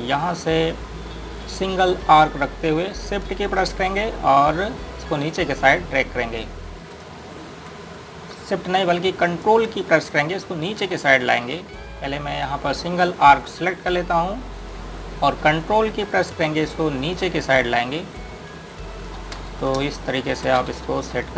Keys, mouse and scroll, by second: 2.5 click, 5.6 shift+click, 8.1 ctrl+z, 10.9 ctrl+click, 12.1 z, 14.8 click, 17.2 click, 20.2 space, 20.8 click.